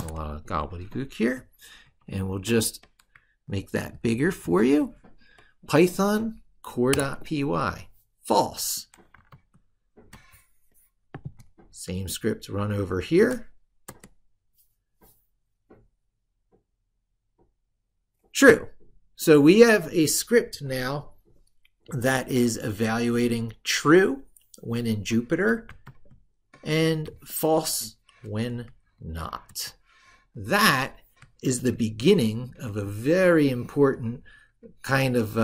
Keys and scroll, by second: 3.8 ctrl+=, 9.2 ctrl+super+Left, 13.0 ctrl+shift+e, 25.6 ctrl+super+Right, 31.9 ctrl+super+Left.